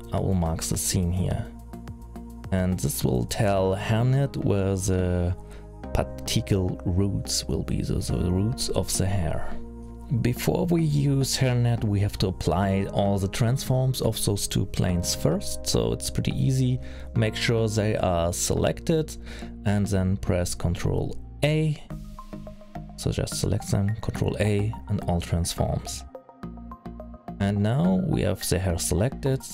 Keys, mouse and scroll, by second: 1.8-2.2 scroll up 4, 2.2-4.2 scroll down 10, 4.2 middle click, 4.2-4.9 scroll down 2, 6.3 click, 7.5 middle click, 8.2 middle click, 8.5-9.3 scroll down 3, 9.3 scroll down 1, 9.6 middle click, 11.8-12.4 scroll down 2, 12.3-12.7 scroll up 2, 16.3 middle click, 19.6 middle click, 20.8 shift+click, 21.4 click, 22.9 ctrl+a, 25.7 middle click, 26.1-26.6 scroll down 5, 26.6 scroll up 5, 27.9 middle click, 29.2 shift+click.